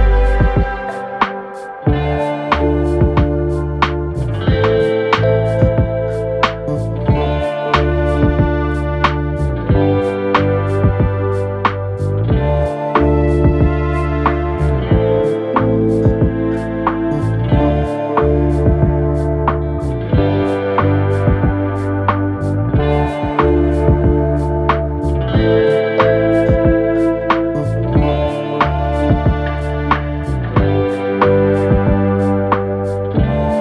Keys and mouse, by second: 0.8 s, 1.4 middle click, 1.7-7.0 drag, 4.9 x, 6.2 z, 7.0-12.7 middle drag, 7.6 z, 9.2 x, 12.7 click, 13.3-14.7 shift+middle drag, 13.4 shift+d, 14.7-16.6 drag, 16.6-33.6 middle drag, 17.5 ctrl+z, 17.7 ctrl+z, 18.7 g, 22.1 KP_1, 22.2 KP_3, 22.7 g, 24.8 s, 27.0 r, 28.0 g, 28.6 shift+d.